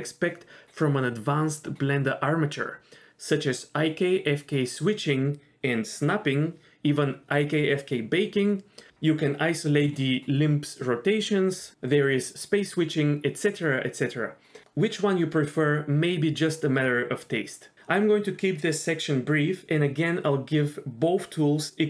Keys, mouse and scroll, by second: 0.3 shift+middle click, 0.4 scroll up 1, 0.7 click, 1.1 scroll down 1, 1.2 shift+middle click, 1.6-2.2 drag, 2.4-2.8 scroll up 3, 2.7 g, 3.4 KP_3, 3.7 g, 4.8 KP_1, 4.9 scroll down 3, 5.0-5.4 shift+middle drag, 6.3 middle drag, 6.4-6.7 scroll up 4, 6.6 middle click, 12.2 click, 12.6 KP_1, 13.1 scroll up 2, 13.2-13.8 scroll down 3, 15.6-16.5 scroll up 2, 18.9 g.